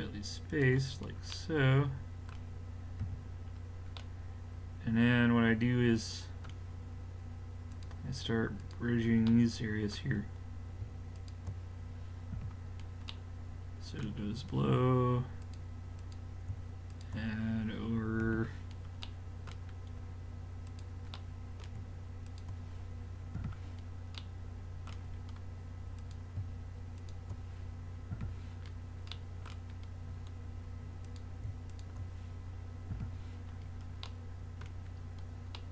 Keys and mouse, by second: 3.1 a, 3.4 middle click, 5.8 middle click, 7.7-10.3 drag, 11.2-12.3 drag, 12.3 f, 12.7 click, 14.3 middle click, 15.4 right drag, 18.2 f, 18.6 middle click, 20.7-21.6 drag, 23.4 f, 24.3 click, 26.0-28.6 drag, 28.1 f, 28.7 click, 31.1 click, 31.7 click, 32.6 click, 32.9 f, 33.5 middle click.